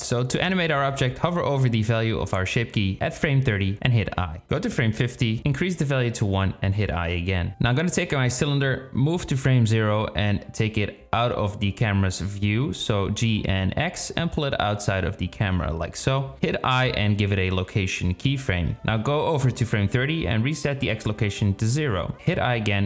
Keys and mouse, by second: 2.3-3.9 drag, 4.1 click, 5.8 i, 7.0 click, 8.4-9.3 drag, 13.2 g, 16.9 i, 18.9 click, 20.1 click.